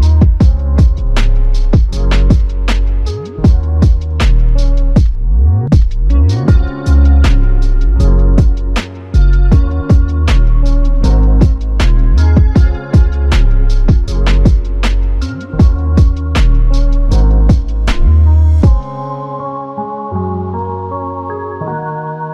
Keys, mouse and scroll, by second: 12.4 alt+click, 16.7 f, 17.7 double click.